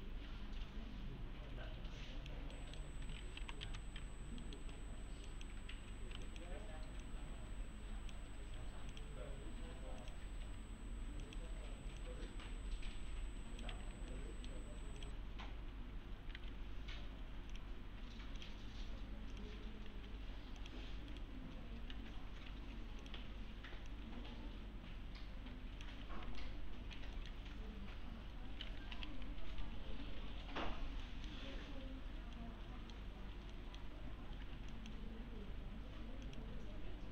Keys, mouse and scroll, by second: 2.5 middle click, 3.2-4.1 typing, 4.1-4.4 scroll down 2, 4.4 middle click, 4.7-5.1 scroll up 2, 5.3 click, 6.3 ctrl+click, 8.4 scroll down 1, 8.6 1, 8.9 click, 9.3-10.0 scroll up 1, 10.0 click, 10.4 1, 11.2 click, 13.7 1, 13.9 scroll down 1, 14.1-14.7 alt+middle click, 14.6 scroll down 1, 15.0 click, 16.2 scroll up 1, 16.4 alt+1, 17.5 click, 19.9 alt+1, 20.6 click, 21.1 right click, 21.9 2, 23.0 click, 25.9 2, 26.4-27.0 alt+middle click, 27.5-28.9 scroll up 1, 28.9 l, 29.6 z, 30.0-30.4 scroll down 1, 31.0 middle click, 31.5-32.3 scroll up 1, 32.3-33.0 middle click, 33.3 scroll down 1, 33.5 middle click, 34.0-34.4 scroll up 1, 34.4 1, 34.7 click.